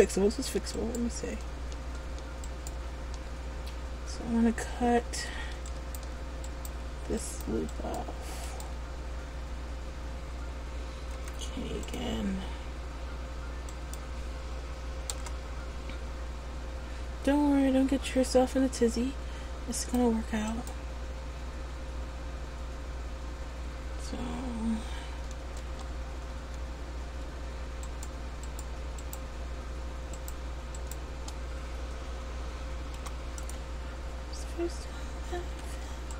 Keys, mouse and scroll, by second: 0.0-0.4 scroll up 1, 0.5 Tab, 0.9 right click, 1.6 Tab, 2.7 right click, 3.1 Tab, 5.8 alt+right click, 7.4 right click, 7.9 alt+right click, 8.6 alt+right click, 11.3 k, 19.9 right click, 25.7 Tab, 27.9 right click, 28.5 shift+right click, 31.0 right click, 33.1 p, 35.5 ctrl+z.